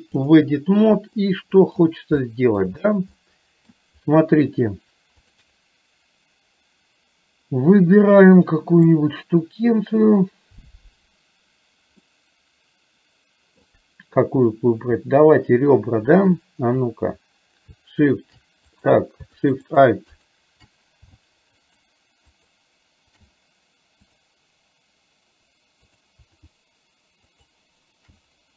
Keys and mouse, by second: 1.3 middle click, 2.4 shift+middle click, 3.3 middle click, 7.9-8.9 middle drag, 12.3-13.8 middle drag, 18.9 click, 19.7 click, 19.7 shift+a, 20.2 click, 21.8 click, 22.4 click, 26.0 click, 27.4 click, 27.4 shift+a.